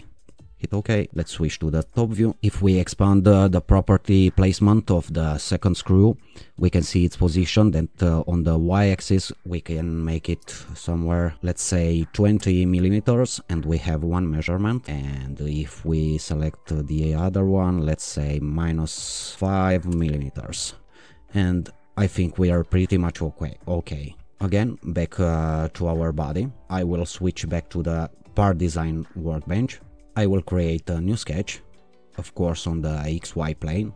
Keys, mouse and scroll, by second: 0.3-1.4 drag, 1.8 2, 4.4 click, 7.0 click, 8.7 click, 10.4 2, 10.7 0, 12.4 Return, 15.7 click, 18.2 click, 19.0-19.9 typing, 21.8 alt+click, 28.1 alt+click, 30.8 click, 33.2 click.